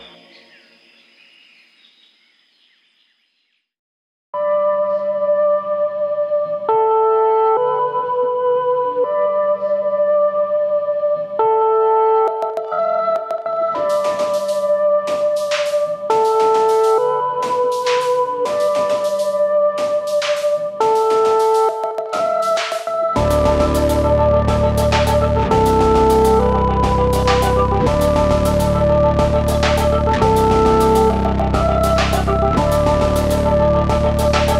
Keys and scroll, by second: 3.3 ctrl+8.